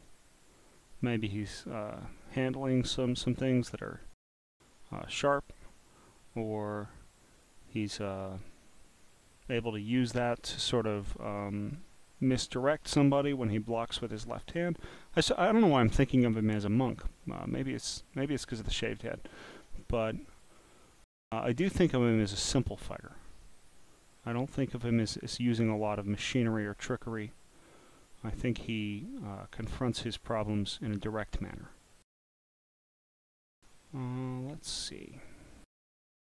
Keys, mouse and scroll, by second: 0.1-0.7 scroll up 8, 1.0-4.1 drag, 5.4-7.5 drag, 8.1-8.4 scroll down 2, 8.5-9.7 drag, 11.0 scroll down 5, 11.3-11.8 scroll up 10, 12.1 click, 12.9-13.5 scroll down 6, 14.2-15.1 scroll down 5, 15.2 scroll down 6, 16.4 click, 18.0 click, 19.3 click, 20.2 click, 24.0-24.9 scroll down 1, 24.9 scroll down 1, 26.7-27.3 scroll up 11, 29.1-30.9 drag, 32.7 scroll down 3, 34.6 scroll down 1.